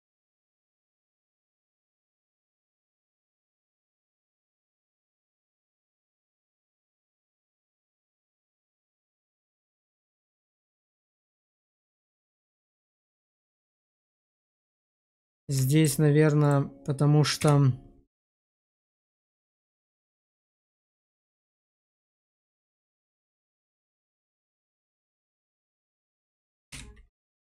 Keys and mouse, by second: 0.8 shift+middle click, 1.3-3.7 middle drag, 4.2 middle click, 5.0 middle click, 5.9 click, 7.0 middle click, 7.7 shift+middle click, 8.1-12.5 middle drag, 13.3 Tab, 14.1 middle click, 15.2 shift+2, 15.6 shift+middle drag, 17.3 /, 18.4 shift+middle drag, 19.0 middle click, 19.3 Tab, 19.8 shift+middle click, 20.3 middle click, 21.7 shift+middle click, 22.7 click, 23.6 click, 24.1 alt+q, 24.5 click, 26.6 1, 27.2 click.